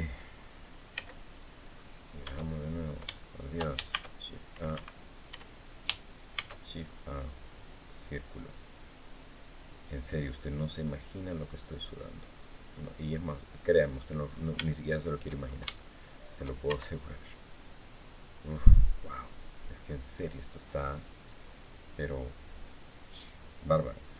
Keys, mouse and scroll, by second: 0.7 x, 1.0 click, 1.5 scroll down 1, 2.2 shift+scroll down 1, 2.9 shift+middle click, 3.0 shift+scroll down 2, 3.6 shift+a, 4.4 Escape, 5.0 Tab, 6.1 shift+a, 7.4 click, 11.1-13.9 drag, 14.0-14.3 scroll up 1, 14.4 shift+click, 15.1 shift+scroll up 1, 15.5 shift+click, 16.4 shift+Tab, 17.6 click.